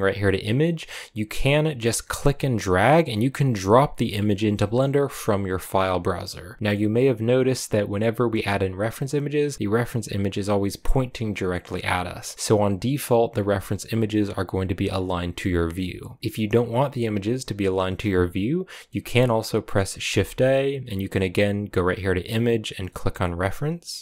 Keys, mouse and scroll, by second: 6.6-9.0 middle drag, 9.0-9.5 scroll up 1, 9.5-10.5 scroll up 1, 10.5-11.4 scroll up 1, 11.4-18.4 middle drag, 19.8 middle click.